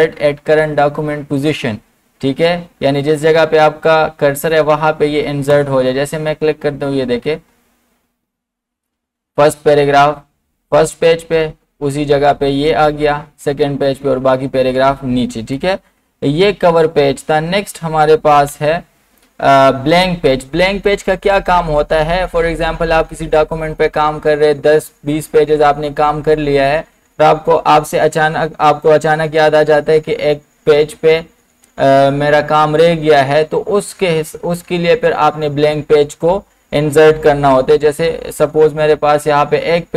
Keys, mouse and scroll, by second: 5.5 right click, 5.5 click, 6.6 scroll up 1, 10.0 scroll up 1, 10.6 scroll down 1, 16.6 ctrl+z, 17.9-18.3 scroll up 1, 18.4 ctrl+z.